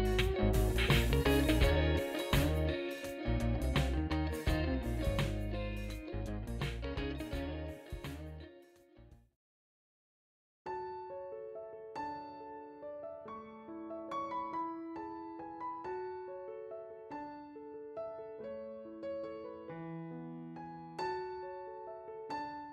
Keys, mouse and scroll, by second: 0.7 F4, 8.4 click.